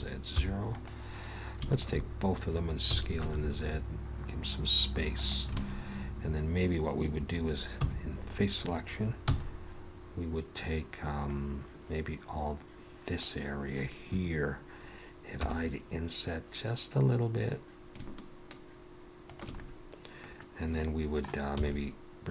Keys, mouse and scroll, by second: 1.7 alt+shift+click, 2.9 s, 5.6 alt+a, 6.2 scroll up 2, 7.8 3, 9.1 c, 15.4 i, 19.6 middle click, 20.4 middle click, 21.6 e.